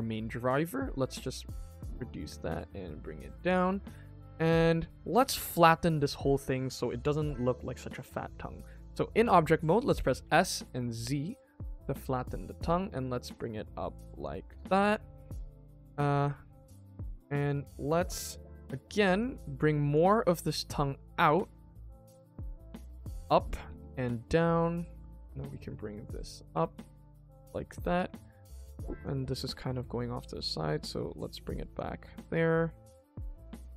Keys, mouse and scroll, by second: 0.4 g, 3.1 shift+middle click, 3.4 Tab, 3.7 middle click, 4.8 middle click, 5.1-6.9 middle drag, 14.5 middle click, 14.7 Tab, 15.2 middle click, 15.8 g, 17.1 scroll up 2, 17.4 shift+middle click, 18.1-18.4 scroll down 3, 18.3 middle click, 19.1 alt+click, 19.8 alt+click, 20.2 g, 22.5 alt+click, 23.1 alt+click, 23.6 g, 24.9 click, 25.1 g, 26.4 Tab, 26.7 middle click, 27.9 Tab, 28.2 shift+middle click, 28.9 alt+click, 29.2 alt+click, 29.6 middle click, 30.1 g, 32.4 click, 33.1 g.